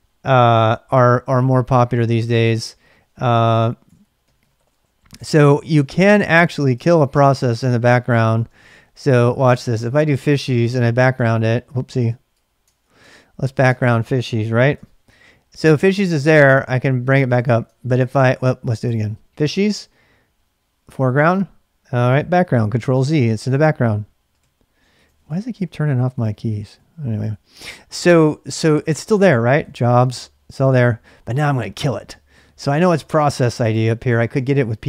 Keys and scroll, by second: 25.9-27.3 typing, 29.3-30.4 typing.